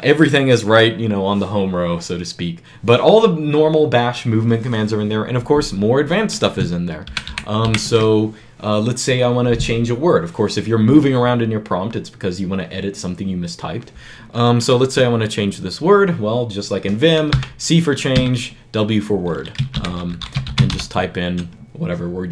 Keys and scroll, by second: 6.9 shift+b, 7.1 shift+b, 7.5 shift+b, 17.1-18.0 typing, 19.3-21.0 typing.